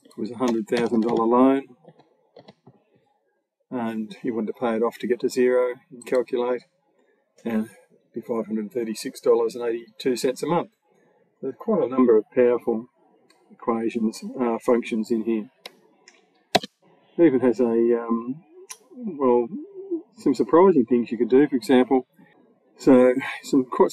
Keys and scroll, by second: 0.3 1, 0.6 0, 16.4 BackSpace.